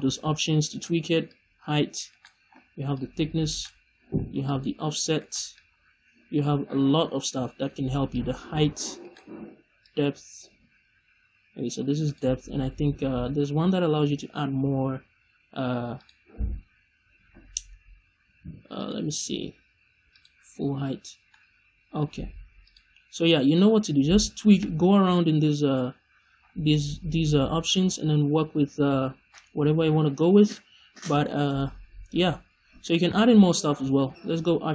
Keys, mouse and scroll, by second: 0.7 right click, 1.2 click, 2.1 right click, 2.9 click, 3.5 right click, 4.4 click, 5.2 right click, 5.7-8.1 scroll down 1, 8.1 click, 9.0 right click, 9.7-12.1 drag, 12.1 right click, 15.9-21.3 drag, 21.3 middle click, 22.5-23.7 drag, 23.7 middle click, 24.7-25.1 middle drag, 24.7-25.1 scroll down 2, 25.1 scroll up 1, 25.7 scroll down 1, 26.3-26.6 scroll up 1, 26.6 middle click, 27.1 scroll down 1, 30.5 middle click, 33.0 shift+a.